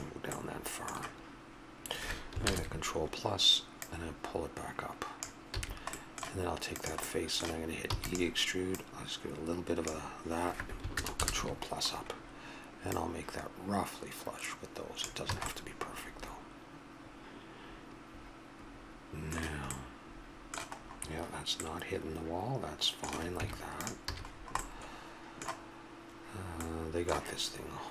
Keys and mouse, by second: 0.5-2.4 middle drag, 3.8-5.2 drag, 5.5 a, 6.7 right click, 7.9 e, 12.8-14.6 middle drag, 15.3 a, 15.5 middle click, 16.0 middle click, 17.3 middle click, 19.7-22.0 middle drag, 23.4 Tab, 24.1 a, 24.7-26.5 middle drag, 26.6-27.9 middle drag.